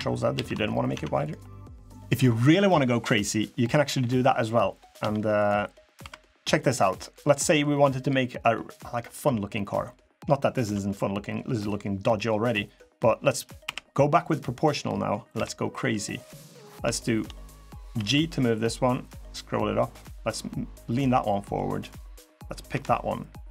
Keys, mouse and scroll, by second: 0.1 ctrl+z, 0.5 middle click, 0.7 Tab, 1.0 click, 1.2 middle click, 1.7 middle click, 1.7 scroll down 1, 3.2-3.6 scroll down 1, 3.6 middle click, 4.0 middle click, 4.6 click, 4.8 Tab, 5.1 click, 5.6 middle click, 5.8 3, 6.2 click, 7.6 scroll down 5, 7.9 middle click, 8.2-8.8 scroll up 3, 12.3 middle click, 13.4 o, 15.1 KP_3, 16.0 scroll down 2, 16.3 scroll up 4, 16.7 shift+middle click, 17.7 g, 21.0 middle click, 21.6 click, 22.5 KP_3, 23.4 g.